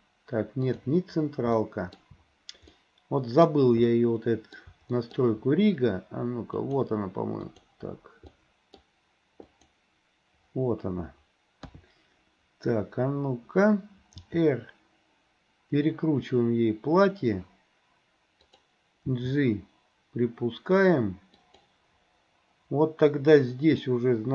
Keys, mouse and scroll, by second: 1.6 shift+middle click, 2.8 middle click, 3.5-3.9 scroll down 1, 3.9 middle click, 4.6 scroll down 1, 5.0 shift+scroll up 1, 5.1 shift+middle click, 6.6 click, 7.4 click, 8.4 middle click, 9.6 click, 11.6 KP_3, 14.2 r, 19.1 g.